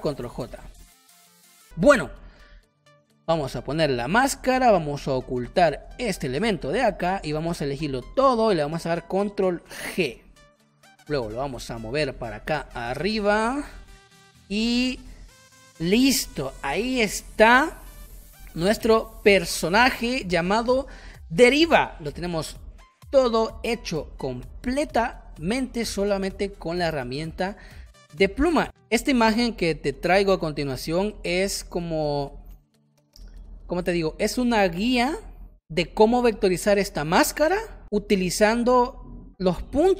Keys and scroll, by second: 0.1 ctrl+j, 0.5 space, 2.1 space, 6.7 space, 9.6 ctrl+g, 10.7 space, 11.5 space, 14.1 space.